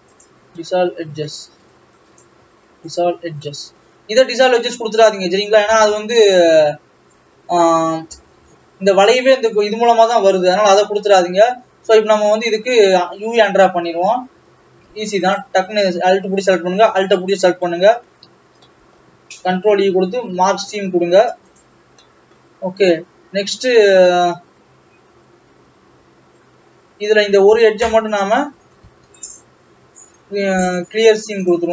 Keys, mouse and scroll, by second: 0.3 x, 0.6-2.3 middle drag, 2.3 click, 3.0 x, 3.3 scroll down 2, 3.5-8.2 middle drag, 8.2-10.6 scroll up 5, 11.8-13.5 scroll down 6, 14.9 alt+a, 15.4 alt+click, 17.1 alt+shift+click, 17.7-21.6 middle drag, 21.6 ctrl+e, 22.1-23.8 middle drag, 23.8 scroll down 2, 24.0 middle click, 24.9-27.0 scroll up 1, 27.0-27.7 scroll up 2, 27.7 click, 28.3 shift+click, 31.5 ctrl+e.